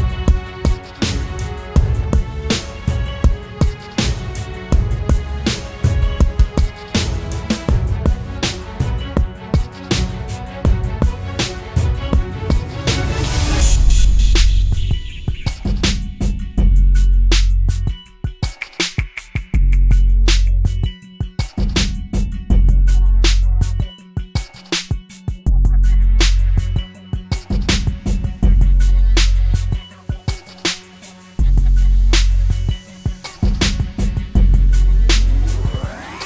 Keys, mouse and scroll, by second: 11.2 ctrl+t, 12.0 alt+shift+click, 15.2 alt+shift+click, 19.9 alt+shift+click, 21.5 alt+shift+click, 25.8 Right, 26.0 Right, 28.2 Return, 32.3 double click.